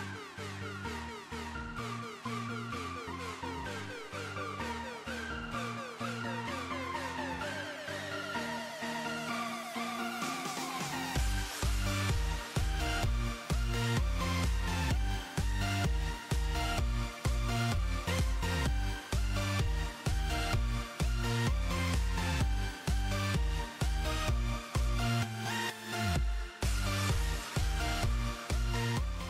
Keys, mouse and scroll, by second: 0.0 click, 0.1 KP_0, 0.9 click, 1.1 click, 2.0 KP_0, 2.2-2.6 scroll up 2, 2.6 shift+a, 3.6 click, 4.0 click, 4.8 click, 5.4 click, 5.8 click, 6.1 s, 6.5 click, 7.0 drag, 7.2 click, 7.5 click, 8.4 ctrl+KP_0, 9.1 click, 10.9 click, 11.5 click, 11.7 space, 12.4-13.4 drag, 13.7 KP_7, 14.0 scroll down 1, 14.3 click, 14.5 click, 14.9 r, 15.4 KP_0, 15.7 click, 16.5 KP_0, 16.6 scroll down 1, 16.7 middle drag, 17.0 scroll up 1, 17.2 click, 17.6-18.0 scroll down 4, 18.1 click, 18.4-19.4 drag, 20.0 middle drag, 20.2 click, 20.3 scroll down 3, 20.5 middle click, 20.9 alt+h, 21.1 scroll up 1, 21.3-21.7 scroll down 1, 21.7 click, 22.0-22.4 scroll down 1, 22.4-23.9 typing, 22.6 click, 22.8 click, 23.1 click, 23.5 click, 23.8 click, 24.1-24.4 middle drag, 24.4 click, 28.1-28.5 middle drag, 28.5 scroll up 1, 28.8 middle click.